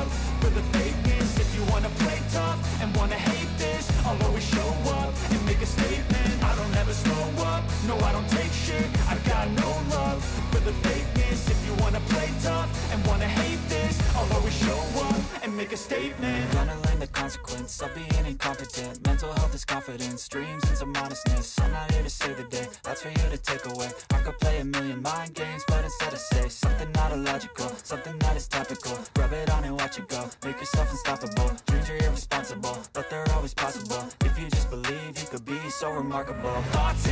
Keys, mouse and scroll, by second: 1.3 click, 2.4 click, 4.6 click, 5.2 click, 6.6 alt+click, 35.0 click.